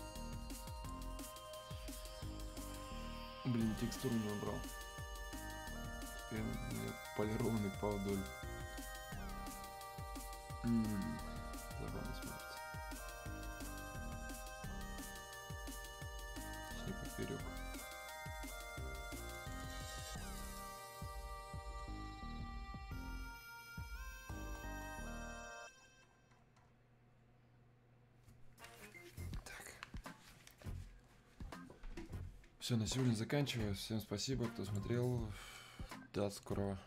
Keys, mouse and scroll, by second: 5.6-6.5 scroll up 1, 13.6-15.4 scroll down 1, 19.2 click, 21.5 scroll down 1, 23.3-25.4 scroll up 1, 25.8-26.7 scroll down 1, 34.6 click.